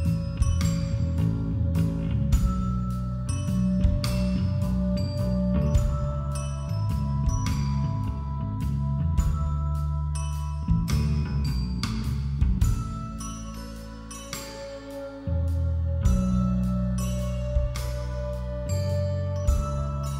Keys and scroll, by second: 0.0 ctrl+-.